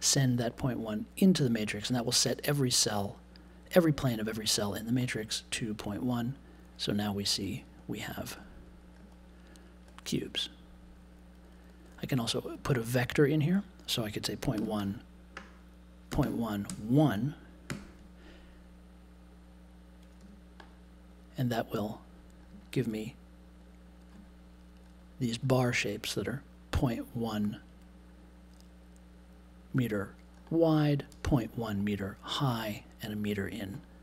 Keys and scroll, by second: 14.5 space, 16.2 space, 16.6 1, 17.6 super+j, 20.2 1.